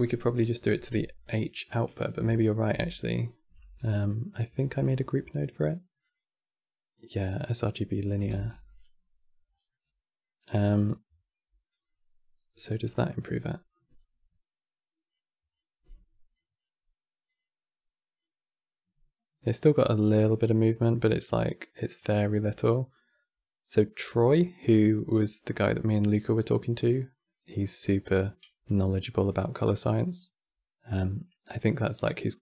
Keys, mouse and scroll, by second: 0.9 click, 1.7 click, 1.9-2.4 alt+drag, 2.4 x, 2.8 click, 3.2 q, 4.3 shift+a, 8.0 g, 9.1 scroll down 3, 9.4-12.5 middle drag, 12.5 click, 16.0-17.0 drag, 28.6 scroll down 2, 28.8 click, 29.3 middle click, 29.7-30.5 scroll up 3, 30.5 click, 31.7-32.4 drag.